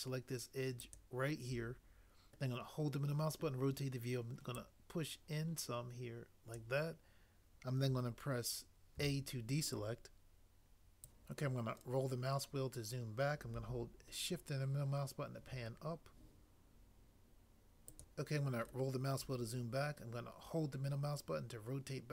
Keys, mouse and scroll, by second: 8.9 a.